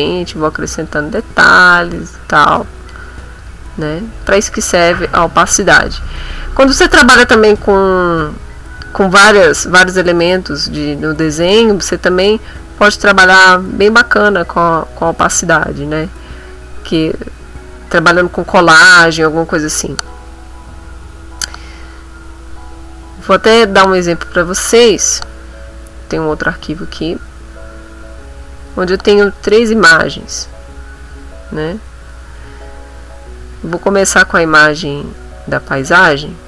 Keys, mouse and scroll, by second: 1.8-3.1 drag, 3.2-4.6 drag, 4.8 middle click, 10.2 click, 10.5 click, 11.2 click, 11.8 middle click, 13.0 click, 14.3 click, 15.2 click, 16.1 click, 17.1 ctrl+middle click, 17.6 ctrl+middle click, 18.6 ctrl+middle click, 25.0 click, 26.5 click, 28.5 click, 29.4 click, 29.7 click, 30.0 click, 31.2 middle click, 32.4 middle click, 33.8 click, 35.5 click.